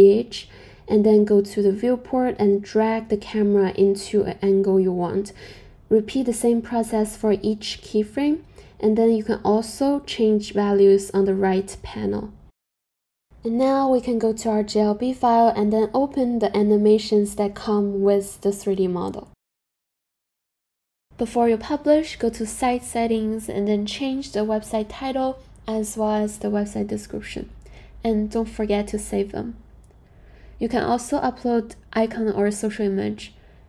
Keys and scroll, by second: 8.0 super+z, 25.3-26.5 typing.